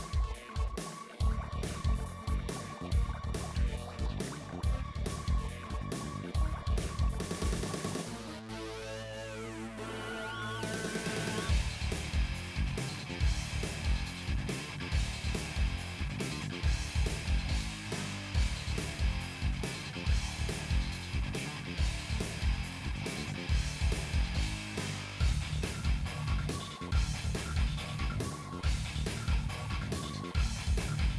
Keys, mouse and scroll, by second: 0.6 3, 0.6 shift+click, 0.9 middle click, 1.6 click, 2.2 middle click, 3.2 2, 3.4 shift+click, 4.2 shift+click, 5.0 shift+click, 5.6 shift+click, 6.1 right click, 7.1 ctrl+z, 7.3 click, 7.7 middle click, 8.0 shift+click, 8.4 middle click, 8.6 right click, 8.8 shift+click, 9.1 right click, 9.3 shift+click, 9.6 right click, 9.9 click, 10.6 shift+Left, 10.8 KP_7, 11.1-12.0 scroll up 5, 11.2 shift+middle click, 11.4 shift+middle click, 12.1 g, 12.7 click, 13.1 s, 13.9 click, 14.6 s, 15.4 scroll up 1, 15.5 scroll down 2, 15.6 middle click, 15.9 middle click, 17.0 click, 17.1-17.4 scroll down 2, 17.4 middle click, 17.9 shift+click, 18.0 middle click, 18.3 f, 19.2 shift+click, 19.6 f, 19.9 click, 20.3 f, 20.5 middle click, 21.4 scroll down 1, 21.5 middle click, 22.5 click, 22.7 3, 22.8 shift+click, 24.0 1, 24.2 click, 24.6 right click, 24.9 shift+click, 25.4 right click, 25.8 click, 26.6 click, 27.1 middle click, 27.7 shift+click, 28.2 right click, 28.5 shift+click, 29.3-31.1 middle drag.